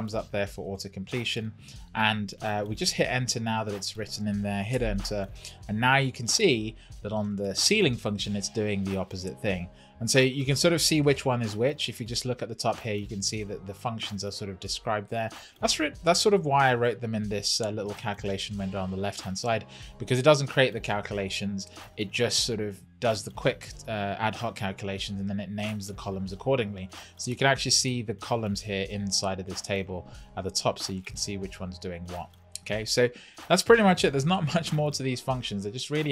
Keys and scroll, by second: 4.7 Return.